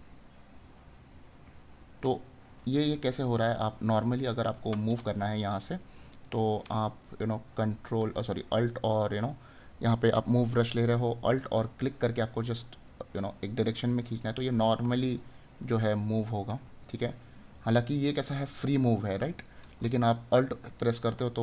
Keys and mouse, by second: 2.2 right click, 4.2 right click, 6.9 right click, 15.1 right click.